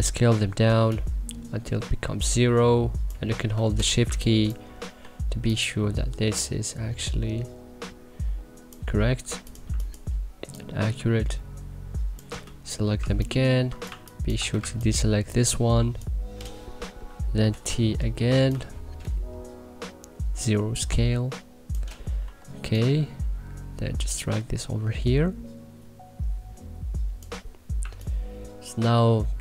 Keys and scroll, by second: 4.0 1, 5.0 e, 9.6 2, 12.3 2, 12.9 1, 13.8 2, 17.5 t, 22.2 e, 27.8 1.